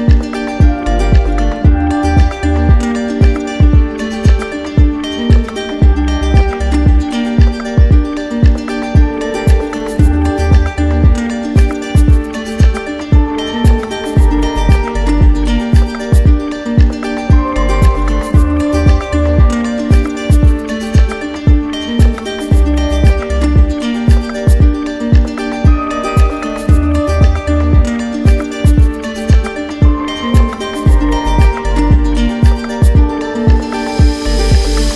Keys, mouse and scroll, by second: 0.0 right click, 7.5 click, 8.8 shift+click, 13.3 alt+click, 14.5 ctrl+z, 21.4 alt+click, 26.6 alt+click, 29.2 right click, 29.8 z, 30.8 z, 34.0 click.